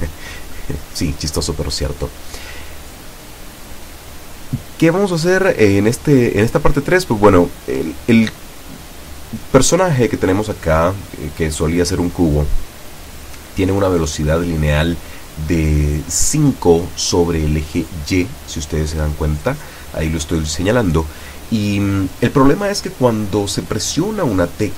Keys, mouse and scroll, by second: 1.8 Up, 7.3 Escape, 9.7-10.5 drag, 11.5-12.2 drag, 18.1 click, 19.2-20.5 drag, 21.1-22.2 drag.